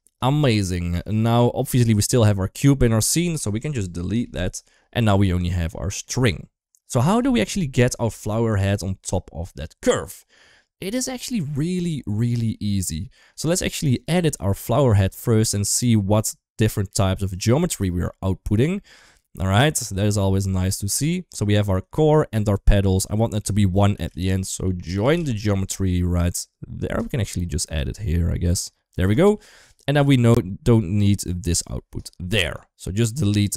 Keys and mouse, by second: 1.8 click, 3.9 Delete, 4.8 click, 5.3 shift+middle click, 5.6 middle click, 6.9 KP_1, 7.3 KP_3, 8.6 shift+middle drag, 11.0-11.4 drag, 12.9 shift+middle click, 13.8 right click, 15.0 middle click, 16.0-16.7 middle drag, 17.3 click, 18.0-19.6 middle drag, 20.4 ctrl+right click, 21.2 ctrl+z, 23.0 click, 23.7 shift+a, 27.5 click, 27.8-28.8 drag, 31.2 ctrl+right click, 33.0 click.